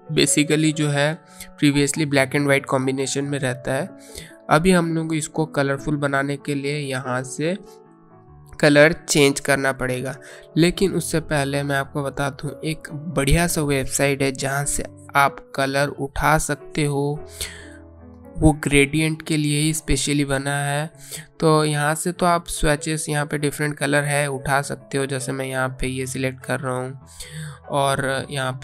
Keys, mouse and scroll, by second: 0.3 click, 3.3 click, 19.3 click, 25.2 click.